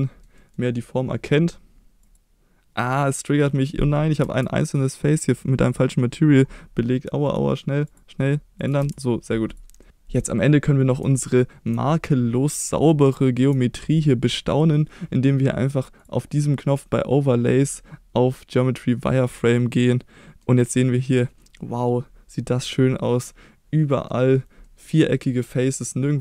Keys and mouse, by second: 0.4 middle click, 2.0 click, 2.8 middle click, 4.2 Tab, 5.0 click, 7.2 click, 7.9 click, 8.8 Tab, 9.5 click, 9.8 middle drag, 10.6 middle drag, 11.3-11.7 shift+middle drag, 12.6 middle click, 13.0-13.5 shift+middle drag, 16.0-19.3 drag, 19.7-20.4 middle drag, 21.4-21.9 middle drag, 22.6-24.1 middle drag, 24.6-25.0 middle drag, 25.5 middle drag.